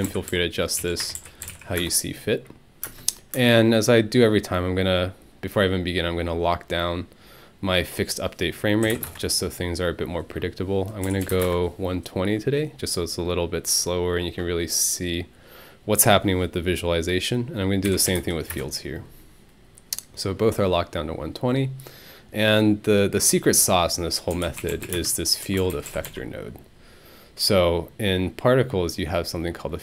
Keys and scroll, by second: 0.0-3.3 typing, 1.0 Tab, 8.6-9.4 typing, 10.8-11.8 typing, 17.6-18.7 typing, 24.1-25.9 typing.